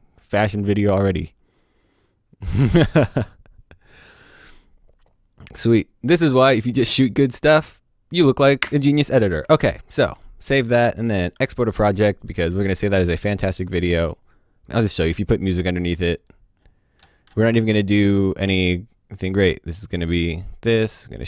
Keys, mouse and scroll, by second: 8.6 space, 9.1 click, 9.5 ctrl+s, 9.6 click, 12.3 click, 14.6 click, 14.9-15.4 scroll down 1, 15.4-16.2 scroll up 1, 16.2 click, 16.5-18.2 scroll down 1, 18.2 click.